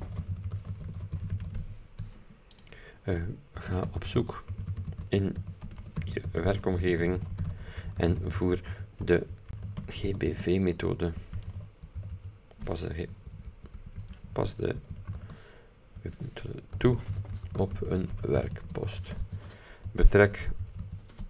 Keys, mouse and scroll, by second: 0.0-2.1 typing, 2.7 click, 3.4-12.7 typing, 13.4 ctrl+Left, 14.8-15.7 typing, 16.1 End, 16.8-21.2 typing.